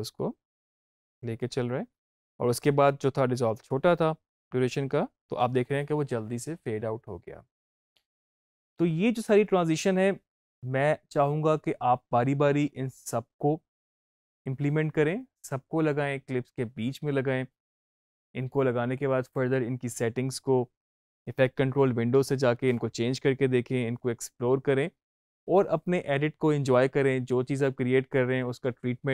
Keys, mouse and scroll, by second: 5.3 space.